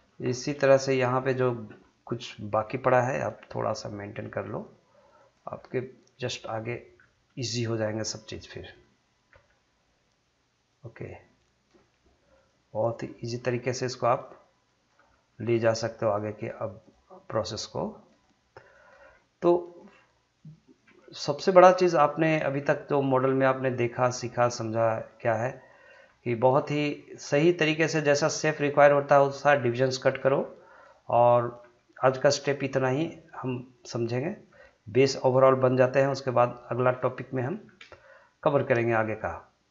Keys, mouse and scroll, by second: 1.0 click, 3.2 g, 4.5 click, 5.4 g, 6.3 click, 6.9-7.3 scroll down 1, 7.4 shift+middle click, 8.2 click, 9.3 g, 10.7 click, 11.7 g, 12.3 click, 13.3 g, 14.1 click, 14.9 g, 15.5 click, 16.2 g, 16.8 click, 17.6 g, 18.0 click, 19.0 g, 19.6 click, 20.8 g, 21.5 click, 22.4 g, 23.0 click, 24.0 g, 25.0 click, 26.0 g, 26.6 click, 27.2 g, 27.8 click, 28.6 g, 29.2 click, 30.3 g, 30.8 click, 31.6 g, 32.3 click, 33.3 g, 33.7 click, 34.5 g, 35.2 click, 36.1 g, 36.9 click, 37.6 scroll down 1, 38.5 scroll up 1, 39.0-39.7 drag.